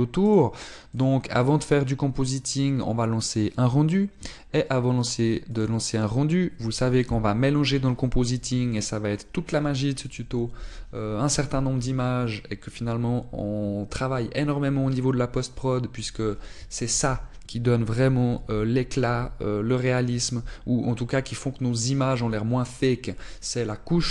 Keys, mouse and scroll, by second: 1.4 click.